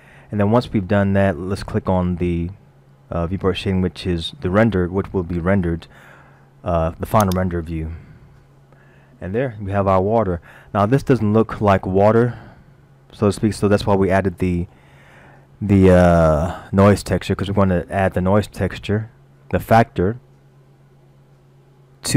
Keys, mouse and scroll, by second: 7.4 click, 9.5 middle click, 11.2-12.0 scroll down 1, 12.6-13.3 scroll down 1, 14.4 middle click, 15.1 middle click, 16.3 middle click.